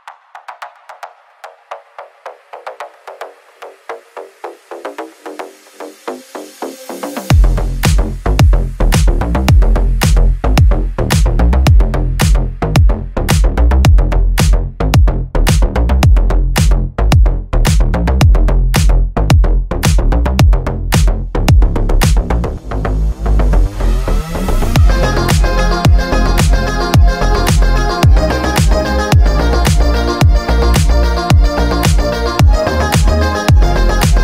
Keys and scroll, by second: 2.3 g, 17.8 g, 32.4 Caps_Lock, 33.7-34.2 typing.